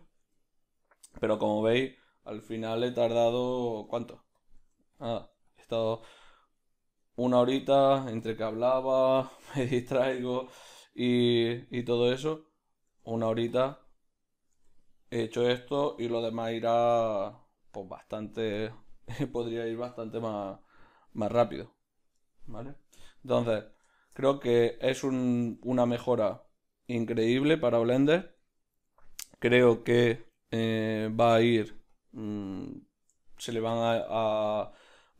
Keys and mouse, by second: 1.6 o, 6.6 right click, 7.4 r, 12.1-13.6 right drag, 13.6 q, 14.5 r, 21.4-23.9 drag, 23.9-25.8 shift+middle drag, 25.8-31.9 right drag, 31.9-33.2 drag, 33.2-35.1 ctrl+middle drag.